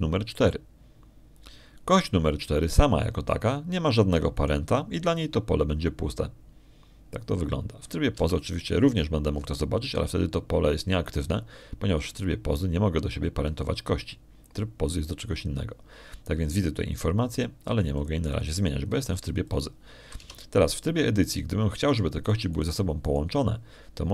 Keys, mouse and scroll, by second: 6.2 right click, 10.0 Tab, 11.1 middle click, 13.9 right click, 19.8 click, 22.1 Tab, 23.7 right click.